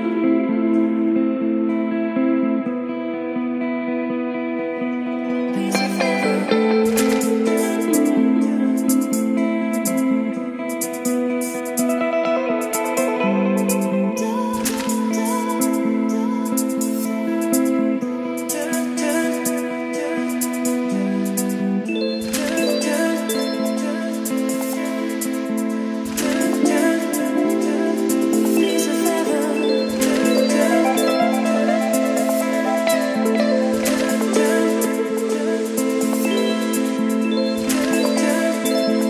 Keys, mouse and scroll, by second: 0.0-10.4 typing, 11.8 click, 13.8-15.9 drag, 17.4-20.6 drag, 20.6 c, 22.0 d, 25.2 Return, 28.0-34.1 drag, 34.1-35.8 middle drag, 35.8-39.0 drag.